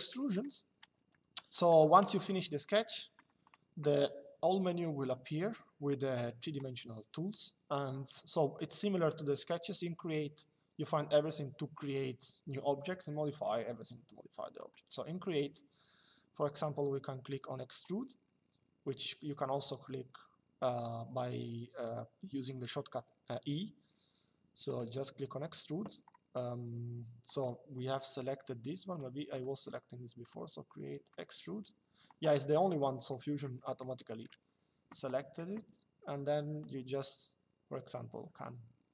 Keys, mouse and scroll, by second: 3.1 click, 14.3 click, 24.4 click, 28.6 click, 32.8 middle click, 33.5 shift+middle click, 36.3 click.